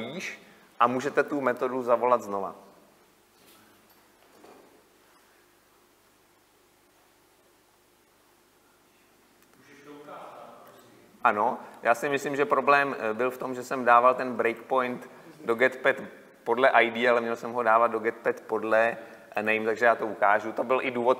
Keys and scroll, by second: 10.9 ctrl+F8, 14.2 ctrl+F8, 19.6 ctrl+F5, 20.3 ctrl+F5.